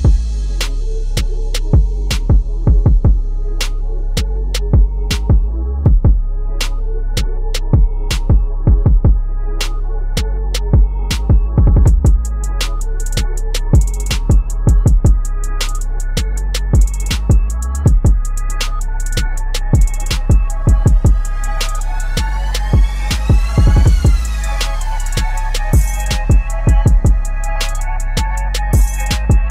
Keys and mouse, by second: 0.2-7.4 drag, 9.6 Right, 13.8 ctrl+], 15.1 click, 16.6 ctrl+g, 16.8 click, 17.3-18.8 typing, 21.8 click, 23.1 a, 23.9 click, 24.2 ctrl+d, 25.4-28.7 shift+drag.